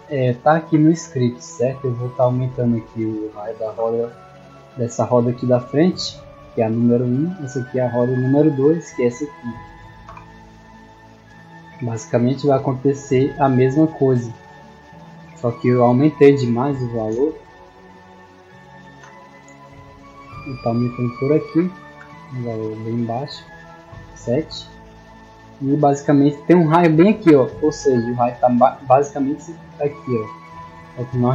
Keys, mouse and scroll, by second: 1.8 click, 4.8 middle click, 5.5 right click, 7.0 click, 8.9 right click, 9.3 scroll down 1, 10.7 scroll up 1, 11.2-11.6 shift+middle drag, 12.0-12.6 scroll up 2, 19.4 click.